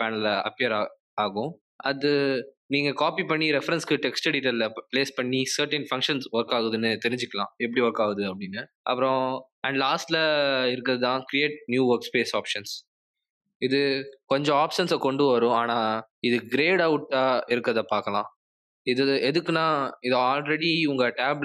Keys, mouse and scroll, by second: 13.9 click.